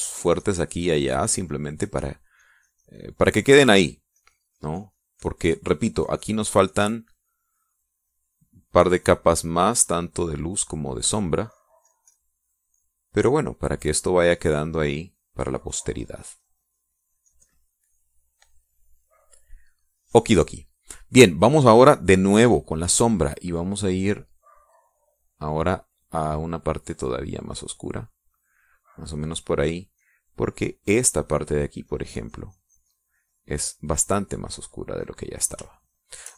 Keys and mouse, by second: 2.3 shift+click, 3.0 shift+click, 3.4 shift+click, 4.3 shift+middle click, 5.2-6.5 drag, 11.7 click, 12.5 click, 12.9 click, 13.5 click, 13.8 click, 14.3 click, 15.3 click, 21.7 middle click, 23.5 click, 25.3-28.7 drag, 29.2 middle click, 29.8 middle click, 31.0-36.3 drag.